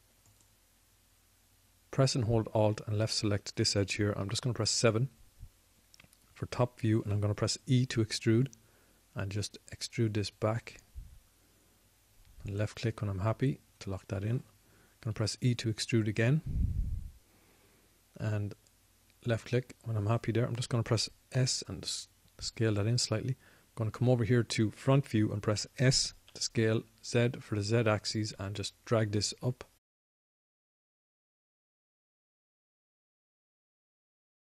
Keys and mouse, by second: 6.2 KP_7, 9.1 e, 17.1 e, 23.3 s.